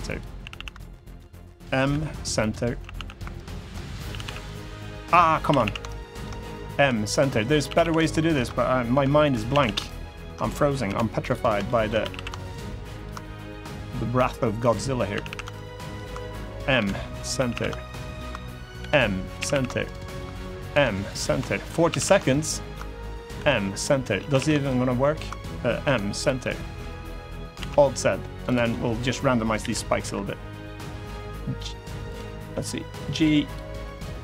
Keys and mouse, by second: 0.1 a, 0.3 a, 0.6 ctrl+right click, 1.6 m, 2.7 a, 3.2 ctrl+right click, 3.8 a, 4.3 right click, 4.3 a, 5.5 ctrl+a, 5.6 ctrl+right click, 6.5 m, 7.1 middle click, 7.4 a, 7.6 a, 7.9 ctrl+right click, 8.6 m, 9.2 a, 9.4 a, 9.6 ctrl+right click, 10.6 m, 11.4 shift+middle click, 11.7 a, 11.9 a, 12.2 ctrl+right click, 12.9 middle click, 13.9 m, 14.7 middle click, 15.0 a, 15.3 ctrl+right click, 16.5 m, 17.1 a, 17.3 a, 17.6 ctrl+right click, 18.5 m, 19.1 a, 19.3 a, 19.6 ctrl+right click, 20.4 m, 21.2 shift+middle click, 21.6 a, 21.8 a, 22.1 ctrl+right click, 23.1 m, 23.7 middle click, 23.9 a, 24.1 a, 24.5 ctrl+right click, 25.6 m, 26.1 middle click, 27.3 alt+z, 27.5 middle click, 28.2 click, 28.4 middle click, 29.3 KP_1, 29.8 KP_3, 30.8 g, 31.8 right click, 32.7 g, 33.2 click, 33.7 click.